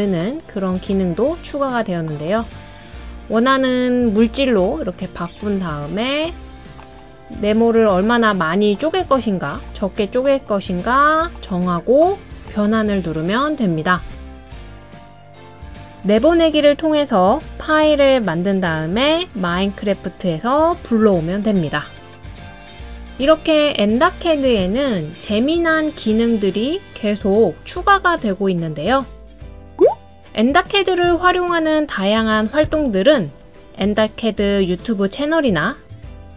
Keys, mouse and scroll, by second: 16.0 click, 16.9 click, 28.5 click, 29.4 click.